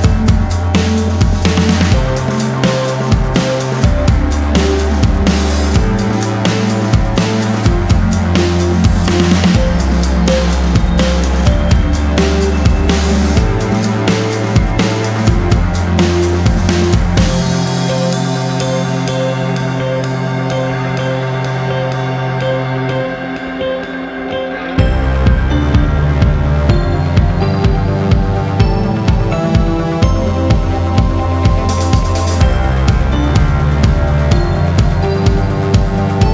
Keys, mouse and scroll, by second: 0.0 click, 0.7 ctrl+z, 1.2-1.5 scroll down 1, 1.5 click, 1.7 double click, 2.5 ctrl+o, 3.5 scroll up 1, 4.6 click, 5.3 click, 9.4 F4, 11.0 F9, 14.5 ctrl+o, 15.9 click, 16.7 click, 18.0 click, 19.0 F4, 19.5 click, 21.8 click, 21.9 double click, 23.0 click, 24.4 click, 25.7 click, 29.1 click, 35.8 click.